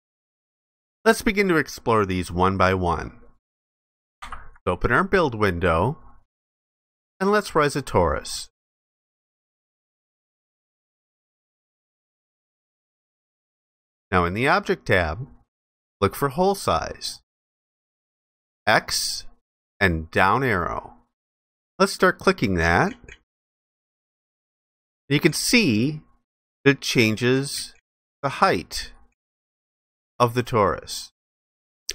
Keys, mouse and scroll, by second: 4.2 ctrl+b, 9.6 z, 10.9 alt+click.